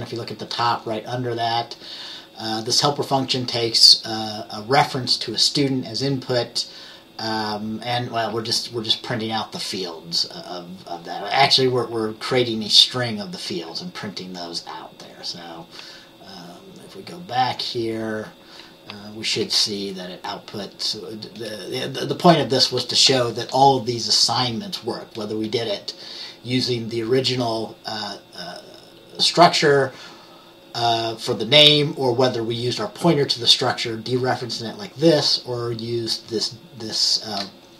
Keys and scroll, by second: 19.4 F10.